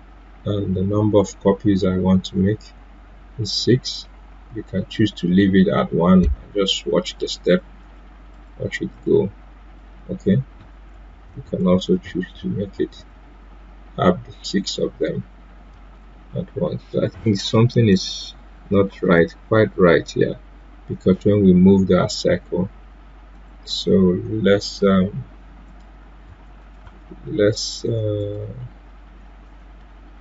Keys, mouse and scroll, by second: 2.2 click, 7.0 click, 10.9 ctrl+z, 15.7 ctrl+z, 23.3 click, 25.6 click, 26.2 BackSpace, 26.6 click, 26.8 BackSpace, 29.7 Delete.